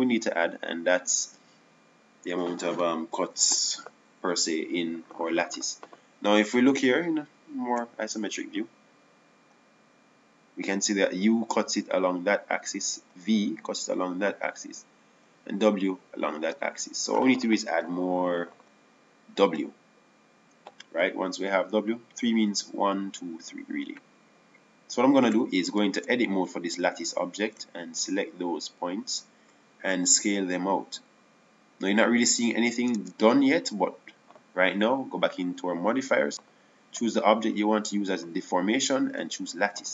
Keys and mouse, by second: 2.0 click, 2.2-3.5 drag, 17.2-23.0 drag, 27.5 Tab, 32.3 s, 34.5 Tab.